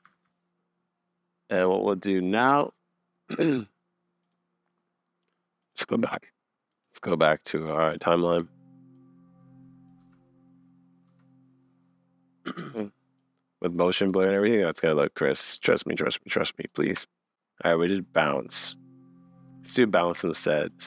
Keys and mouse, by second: 0.1 super+s, 4.4 click, 5.8 click, 6.7 click, 9.0 click, 10.0 space, 11.1 space, 13.2 click, 14.1 space, 15.6 space, 15.8 click, 16.8 space, 17.3 click, 17.3 space, 18.7-19.3 middle drag, 20.3 click, 20.8 click.